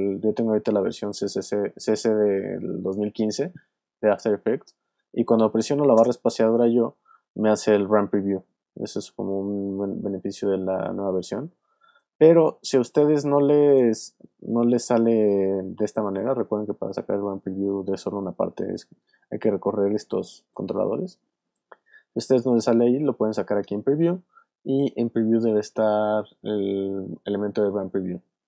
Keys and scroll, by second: 6.0 space, 11.8 space, 12.4 alt+space.